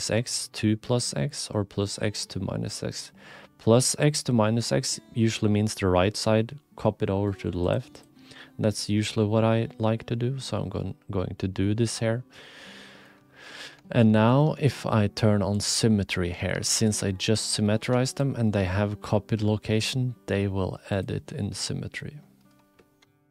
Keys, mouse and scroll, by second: 7.7 click, 8.0-9.1 drag, 10.1-13.0 middle drag, 13.9 shift+click, 14.6 alt+z, 15.5 click, 16.4 3, 16.8 click, 17.3 click, 17.8 2, 18.1 click, 19.3 g, 21.2 click.